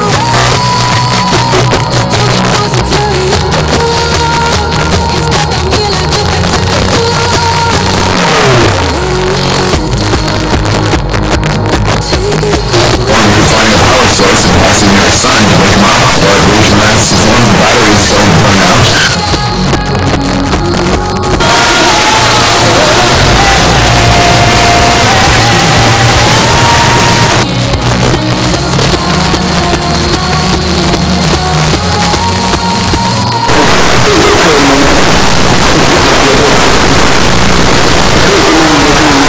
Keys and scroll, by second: 0.6 Down, 0.7 Down, 0.9 Down, 1.0 Down, 1.2 Down, 1.3 Down, 1.6 Down, 1.7 Down, 2.3 Down, 2.5 Return, 19.0 Page_Down, 27.3 Page_Down.